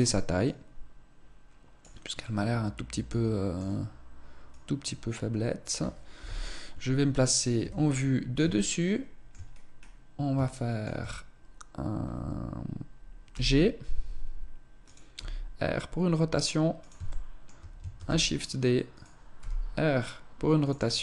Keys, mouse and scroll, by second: 0.2 click, 1.9 middle click, 4.3 click, 5.9 KP_7, 7.3 KP_7, 8.6 shift+middle click, 9.3-10.1 scroll down 2, 10.4 shift+middle click, 13.1 g, 14.9 r, 16.9 shift+middle click, 17.7 shift+d, 19.1 r, 20.4 click.